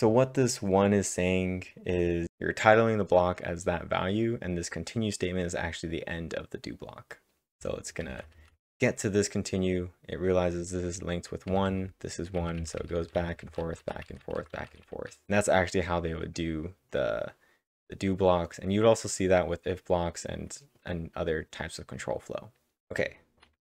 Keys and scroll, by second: 0.0-0.4 typing, 7.5-9.1 typing, 11.5-15.4 typing.